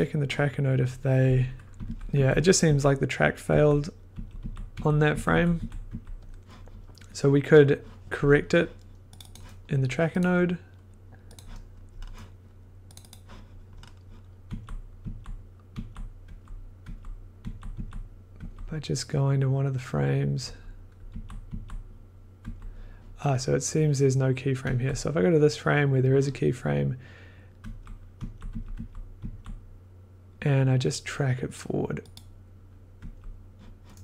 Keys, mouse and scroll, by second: 1.7 Left, 1.8 Left, 2.1 Right, 4.3 Right, 4.7 Right, 5.1 Right, 5.3 Right, 5.5 Right, 5.8 Right, 9.2-11.5 drag, 11.9 scroll, 12.9 click, 13.1 click, 13.7-14.1 scroll, 14.4 Left, 15.0 Left, 15.7 Left, 16.2 Right, 16.8 Right, 17.7 Right, 18.3 Right, 20.4 Right, 21.0 Left, 21.4 Left, 22.4 Right, 24.6 Left, 27.6 Right, 28.1 Left, 28.4 Right, 28.7 Right, 29.1 Left, 32.1 click, 33.0 Right.